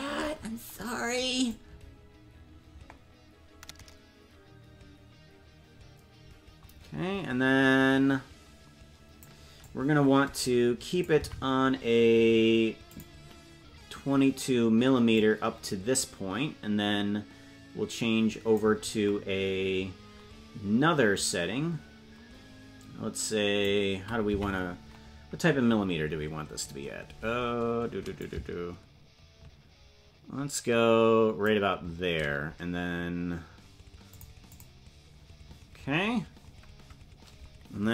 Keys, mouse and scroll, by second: 0.1-0.8 scroll up 1, 0.8-1.4 scroll up 10, 1.5-9.3 drag, 9.6-11.1 drag, 11.2 Right, 12.9 click, 15.2-18.6 drag, 21.2-23.7 drag, 24.4 Left, 26.4-27.3 scroll up 3, 27.3-28.0 scroll up 2, 28.2-31.5 drag, 34.1 click, 34.5 click.